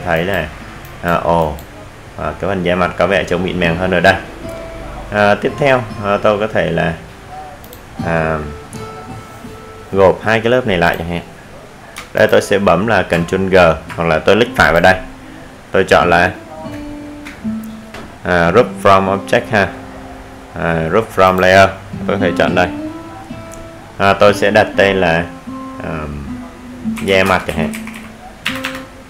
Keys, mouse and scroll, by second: 0.6 click, 4.2 right click, 11.0 click, 16.0-19.0 typing, 26.7 click.